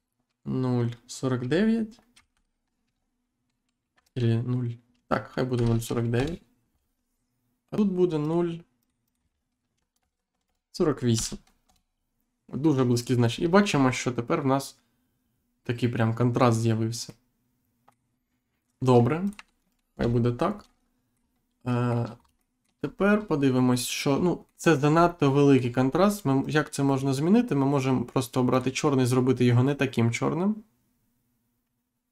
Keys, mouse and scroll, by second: 2.2 9, 3.8 BackSpace, 6.1 Return, 8.2 click, 8.8 click, 9.7 BackSpace, 13.2-13.6 scroll up 1, 13.6 scroll down 1, 14.0 middle click, 16.7-17.0 scroll up 1, 17.0 middle click, 19.2 click, 19.3 1, 19.9 Return, 20.3-20.7 scroll down 2, 20.7 middle click, 21.6 shift+middle click, 22.2 scroll down 2, 22.6 shift+middle click, 22.8 scroll up 1, 23.6-24.0 scroll up 1, 24.4 middle click, 24.9 scroll down 1, 25.3 middle click, 25.8 scroll up 1, 26.4 click, 28.5 click, 29.6 click.